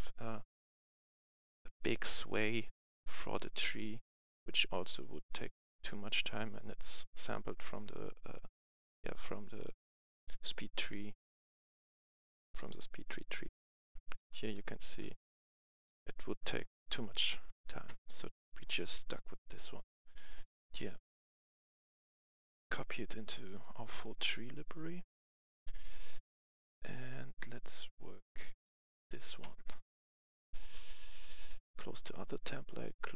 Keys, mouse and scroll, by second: 13.4 F11, 13.5 F10, 13.8 right click, 14.2 scroll down 1, 14.4-15.6 right drag, 15.8 click, 15.8 F10, 17.1 right click, 18.5-33.1 drag.